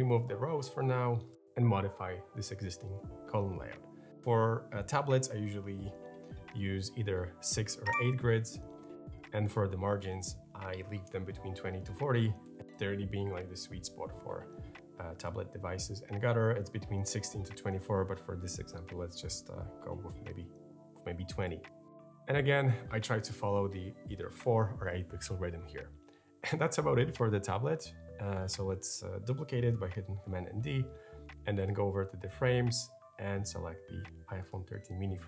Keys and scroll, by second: 7.2 6, 7.3 Return, 11.9-12.8 typing, 19.6 2, 20.1 Return, 30.3 super+d.